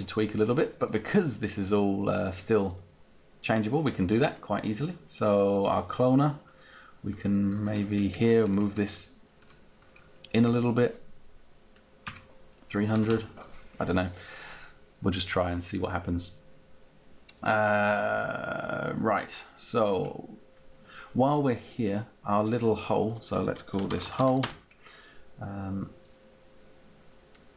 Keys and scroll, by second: 7.5 Down, 9.7 Up, 10.2 Down, 12.8 Up, 23.8-24.7 typing.